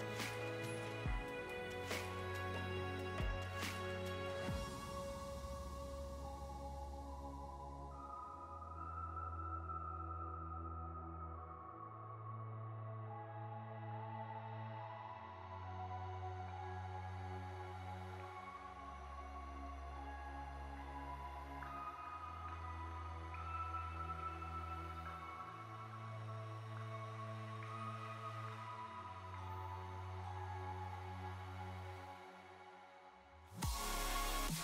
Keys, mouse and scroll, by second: 1.0 click, 1.3 click, 1.4 click.